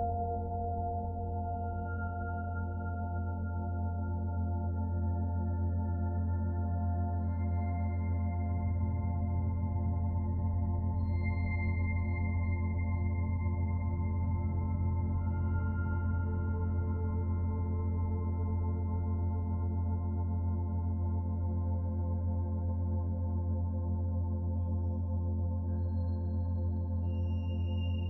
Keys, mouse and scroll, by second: 3.7 middle click, 6.0-6.4 scroll up 1, 6.5 middle click, 7.6 middle click, 10.7-11.1 scroll up 1, 11.4 shift+middle click, 12.4 scroll up 1, 12.7 middle click, 13.2 middle click, 15.5 shift+middle click, 15.6 shift+middle click, 16.2-18.2 scroll down 1, 26.0 click, 27.1 click.